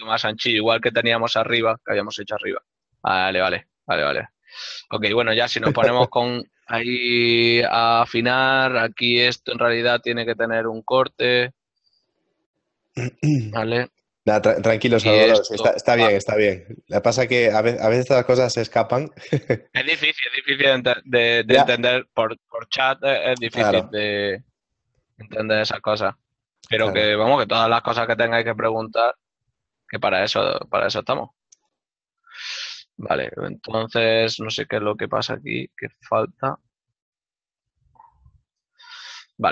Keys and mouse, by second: 0.5 shift+middle click, 1.3 ctrl+middle click, 4.3 middle click, 5.5 Tab, 5.9 click, 8.9 middle click, 10.1 shift+middle click, 12.3 click, 14.1 ctrl+Tab, 14.9 click, 14.9 right click, 15.7 e, 19.6 right click, 20.4 shift+right click, 20.8 shift+middle click, 23.5 middle click, 24.0 click, 25.5 middle click, 25.7 click, 26.9-27.8 typing, 26.9 right click, 29.5 Tab, 29.9 click, 30.5 shift+middle click, 30.9 middle click, 39.3 shift+middle click.